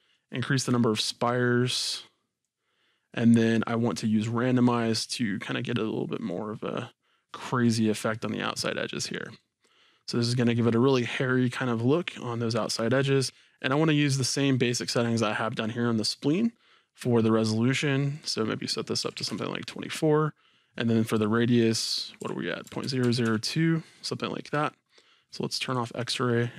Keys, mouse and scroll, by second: 19.4 KP_Enter, 22.2 click, 22.8 KP_0, 23.0 KP_2, 23.4 KP_Enter, 25.2-25.8 drag.